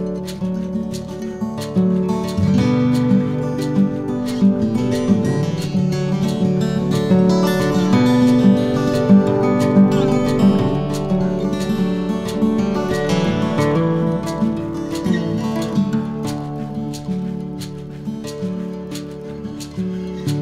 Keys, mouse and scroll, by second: 1.4 r, 15.8 b, 18.1 e, 19.9 click.